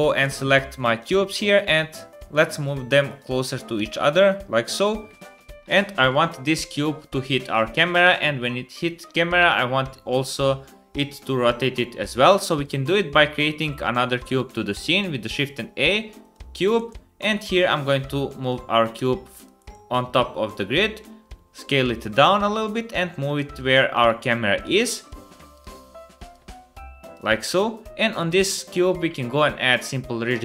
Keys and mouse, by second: 0.0 KP_1, 0.6 shift+middle click, 0.9 shift+middle click, 1.0 shift+click, 1.5 g, 2.4-3.8 drag, 3.5 g, 4.5-6.1 middle drag, 5.4 space, 12.3-13.5 drag, 14.6 shift+a, 16.7 KP_1, 17.3 g, 18.4 click, 19.5 KP_3, 20.8 s, 22.1 g, 24.1 g, 25.0 g, 25.7 s, 26.3 g, 28.7-29.8 middle drag, 30.2 KP_7.